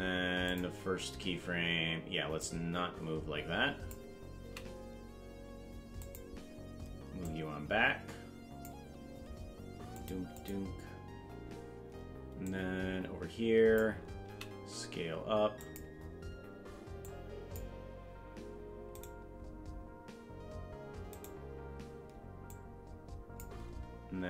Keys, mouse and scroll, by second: 0.4 click, 2.4-4.0 drag, 4.4 s, 7.2-8.7 drag, 9.9 click, 10.3 click, 12.4-13.8 drag, 14.2 s, 17.0 click, 19.0 right click, 22.4 click.